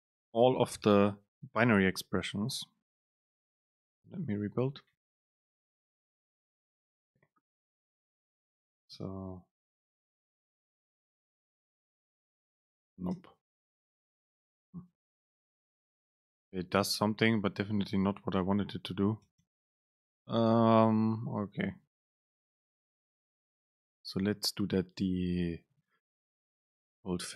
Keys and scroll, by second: 4.1 ctrl+shift+super+F9, 9.4 super+space, 13.3 BackSpace, 14.4 Return, 19.4 BackSpace, 26.9 shift+Up.